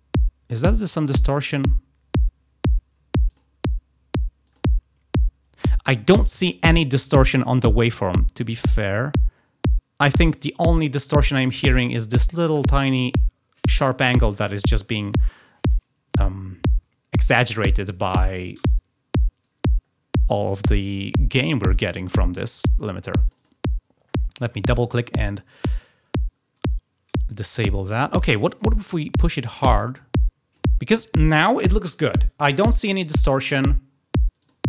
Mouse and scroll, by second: 3.2 click, 4.4 click, 23.1 click, 23.3 click, 28.5-30.5 drag, 34.3 click.